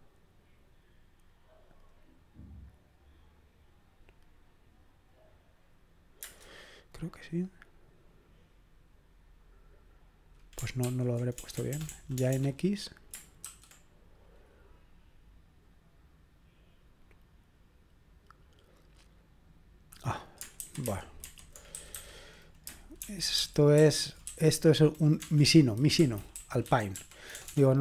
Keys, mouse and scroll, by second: 10.8 ctrl+p, 11.4-12.3 typing, 13.5 typing, 20.6 alt+b, 20.9 alt+b, 21.2 alt+b, 21.8 typing, 23.0 alt+f, 23.4 alt+f, 23.8 alt+f, 24.3 a, 26.0 Right, 26.3-27.8 typing.